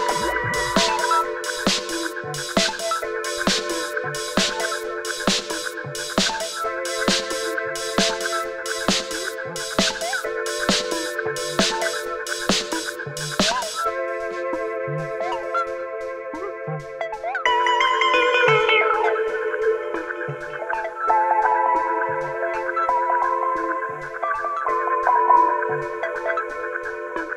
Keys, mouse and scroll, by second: 0.0-1.4 alt+drag, 1.7 alt+scroll up 1, 2.1-2.5 click, 2.4 space, 2.8 click, 4.6-7.6 typing, 8.4-11.7 drag, 11.7-13.6 alt+drag, 14.1 alt+scroll up 1, 15.0 space, 15.0-15.4 click, 15.3 space, 15.6 click, 17.3-18.4 typing, 18.7 Down, 18.9 Return, 20.2 click, 22.1 click, 23.4 Right, 24.1 click, 26.7 ctrl+a.